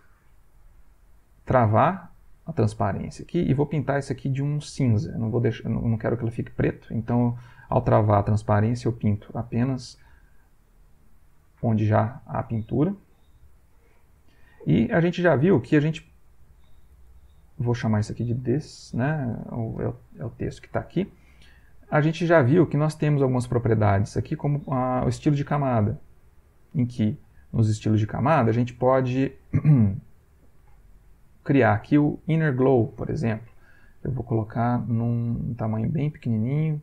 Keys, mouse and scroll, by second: 1.7 click, 3.6-4.9 drag, 5.3-8.0 drag, 9.2 click, 10.4-11.4 ctrl+middle drag, 11.5 ctrl+shift+middle click, 11.9 shift+click, 13.5 ctrl+alt+v, 13.8 ctrl+alt+click, 16.2 click, 17.8-19.5 typing, 22.0 right click, 22.8-26.0 right drag, 27.2-28.5 drag, 31.0 click, 36.0-36.8 drag.